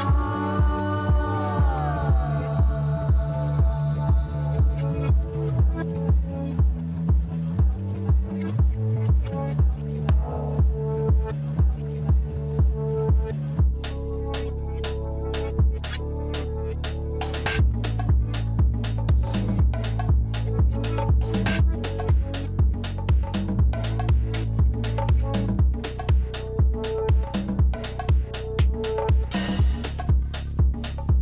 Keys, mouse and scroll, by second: 0.9 shift+click, 5.5 click, 6.3-6.8 scroll up 2, 6.8 shift+middle click, 7.6-8.6 scroll up 4, 8.6-10.8 shift+middle drag, 10.8-11.4 scroll up 2, 11.4 shift+middle click, 11.9-12.5 scroll up 1, 12.5 click, 15.4 shift+click, 17.0-18.5 scroll down 8, 18.5 shift+middle click, 19.4-20.1 scroll up 2, 20.1 shift+click, 21.4 shift+click, 23.1 shift+click, 24.0-24.7 scroll down 1, 24.7 shift+click, 25.8 shift+click, 28.3-28.7 scroll down 1, 28.7 shift+middle click, 29.3 scroll up 2, 30.4 shift+click.